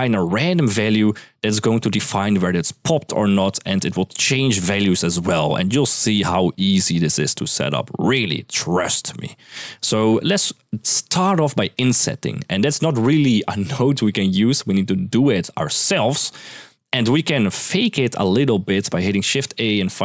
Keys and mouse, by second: 1.1-8.5 d, 9.2 click, 9.2 d, 9.4 middle click, 9.9 middle click, 16.1 click, 17.3 middle click, 17.8 middle click, 19.0 shift+a.